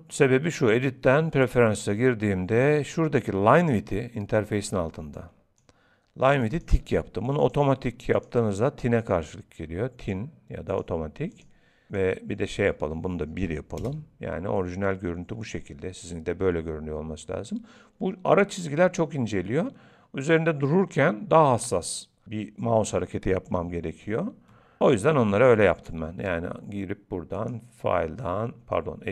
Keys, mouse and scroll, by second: 27.3 click.